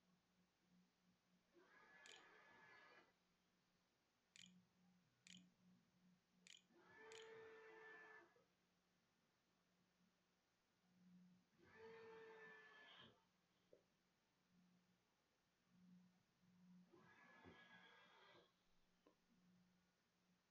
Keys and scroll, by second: 1.5 Tab, 3.2-4.1 typing, 4.7 Return, 5.5 shift+Return, 5.8 shift+], 6.3 shift+[, 6.7 Return, 7.8-8.7 typing.